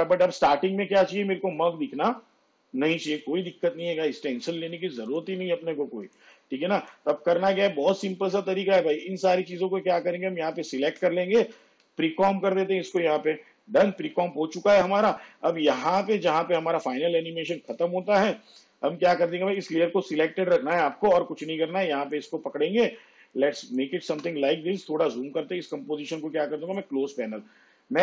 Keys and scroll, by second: 12.0 ctrl+shift+c, 23.3 space.